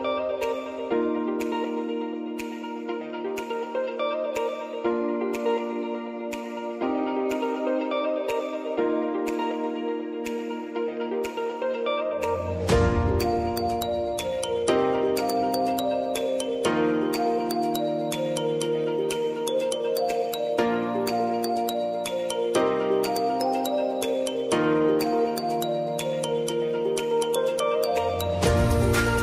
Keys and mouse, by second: 4.9 click, 5.2 r, 6.6 click, 7.4 F9, 8.5-13.7 drag, 13.7-15.9 drag, 17.1 space, 21.6 space, 22.5 click, 23.1 space, 24.5-29.2 drag.